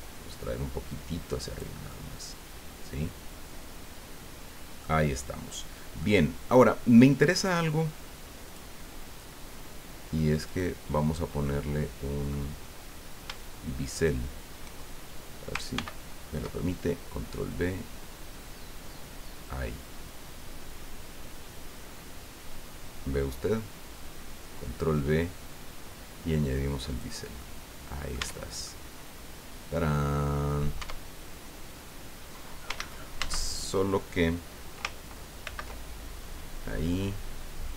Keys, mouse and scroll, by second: 1.9-5.0 middle drag, 6.0 middle click, 6.7-7.1 scroll up 2, 8.4 click, 10.4 right click, 11.0 scroll down 2, 11.4-12.5 middle drag, 14.0 shift+right click, 15.7 ctrl+b, 26.9 click, 27.4 middle click, 28.2 Tab, 28.6-30.7 drag, 30.8 Tab, 32.7 ctrl+z, 35.4 ctrl+b, 37.3-37.7 scroll up 2.